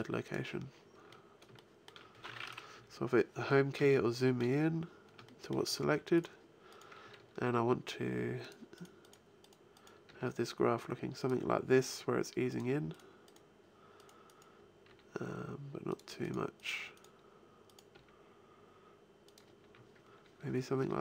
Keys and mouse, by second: 2.6 Home, 7.2 g, 9.9 g, 13.2-14.7 right drag, 14.7 g, 17.8 g, 19.5 a.